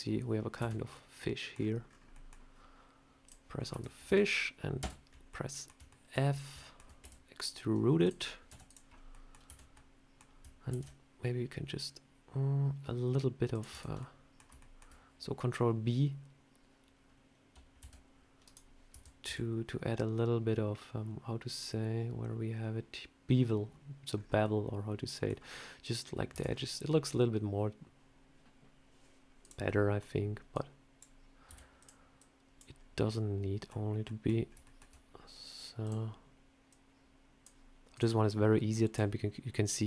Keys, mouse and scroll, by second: 0.5 a, 0.8 middle click, 1.4-2.0 scroll down 7, 2.0 middle click, 3.1 click, 3.4 scroll up 3, 3.6 Tab, 3.9 a, 4.3-4.7 scroll up 2, 4.7 f, 4.9 scroll up 2, 5.2 middle click, 5.8 shift+middle click, 6.2 scroll down 2, 6.5 shift+middle click, 6.9 e, 8.4 z, 8.8 scroll up 2, 9.0 middle click, 9.3 a, 9.6 middle click, 10.6 ctrl+b, 13.6 Tab, 13.8 scroll down 1, 13.9 middle click, 13.9 scroll up 1, 14.3 scroll down 1, 14.5 shift+middle click, 18.3 right click, 18.3 a, 18.8 Tab, 19.2 a, 24.0 scroll up 3, 24.3 middle click, 26.2 Tab, 26.3 scroll down 3, 29.0 scroll down 2, 29.3 click, 29.5 middle click, 30.4 click, 31.4 s, 32.1 click, 32.6-33.0 scroll up 1, 33.0 middle click, 33.5 scroll down 1, 33.9 middle click, 34.3 scroll up 2, 34.5 shift+middle click, 35.7 click, 36.6 click, 37.8 click, 38.6 click.